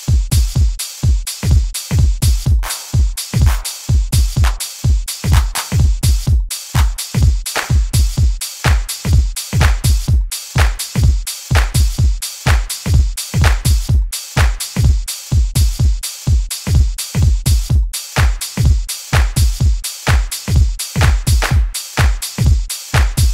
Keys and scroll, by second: 2.5 s, 3.0 Down, 3.3 s, 4.0 Return, 4.4 s, 5.0 Down, 5.1 Return, 5.2 s, 6.7 s, 7.2 Down, 7.3 s, 18.1 s.